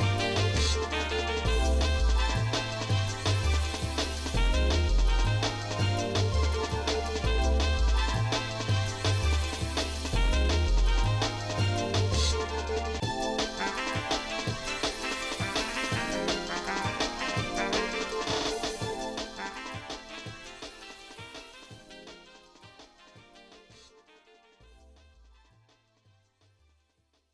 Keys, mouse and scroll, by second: 6.4 Tab, 7.0 click, 8.2 l, 9.1-10.4 shift+middle drag, 11.6 click, 12.3 click, 13.0 click, 13.3 shift+middle click, 13.8 middle click, 14.4 middle click, 15.2 shift+middle click, 16.0-16.6 scroll up 3, 17.4 shift+middle click, 19.7 l, 21.0 shift+middle click, 21.5 Tab, 22.2 shift+middle click, 22.9 Tab, 23.6 ctrl+Tab, 26.3 click.